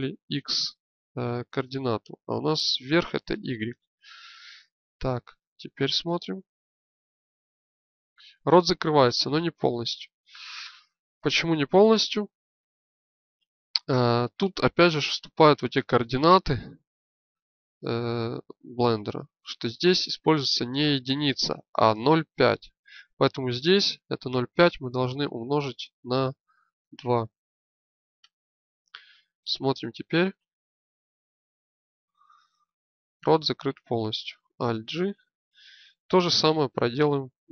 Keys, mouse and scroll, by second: 3.3-4.5 drag, 5.7 shift+space, 13.4 alt+g, 14.6 shift+space, 22.9-28.9 drag, 29.8 shift+space, 31.6-32.8 middle drag, 34.7 alt+g.